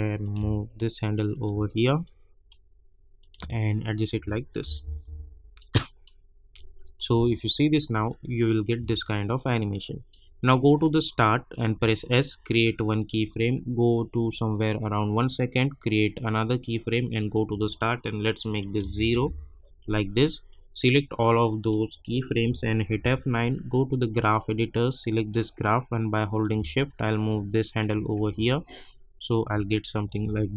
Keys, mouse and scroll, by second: 2.0-4.6 drag, 4.6 -, 4.8 -, 5.0 -, 5.5 click, 7.1 space, 9.5 click, 10.3 scroll up 1, 11.1 scroll up 1, 11.7 s, 12.6-18.3 drag, 19.1 Return, 19.4 scroll down 1, 20.5-22.9 drag, 22.9 F9, 24.2-28.3 drag, 28.3 space.